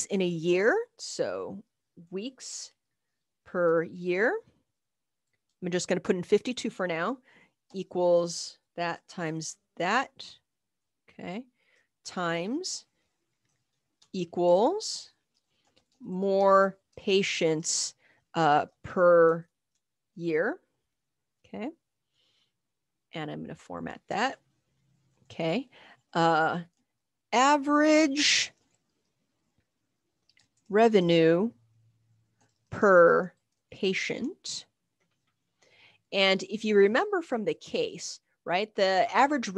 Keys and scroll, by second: 1.7 Up, 2.0-2.7 typing, 4.4-6.2 typing, 7.7 =, 8.7-12.1 typing, 13.5-14.5 typing, 14.8 Right, 15.6-21.7 typing, 26.3-28.3 typing, 30.1-34.5 typing, 36.8-37.6 typing.